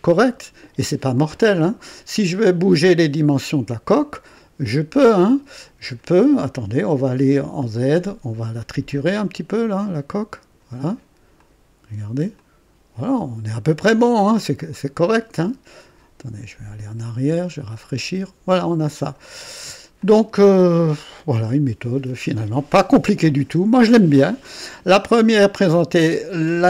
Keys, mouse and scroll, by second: 2.0-2.3 scroll down 1, 4.3-6.1 drag, 7.5 click, 9.4-10.7 drag, 11.3 click, 12.3-14.7 drag, 14.8-15.7 scroll up 1, 17.0 click, 17.7 click, 18.6 click, 19.4 scroll down 1, 20.0-23.6 drag, 23.7 click, 24.9 right click.